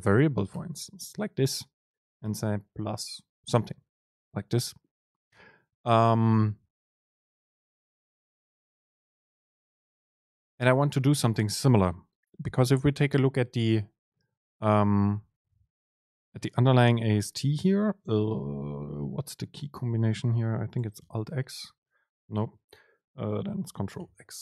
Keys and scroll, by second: 9.0 Up, 9.7 Down, 10.2 shift+Left, 14.2 shift+Right, 15.4 shift+Down, 22.8 super+z, 24.1 ctrl+x.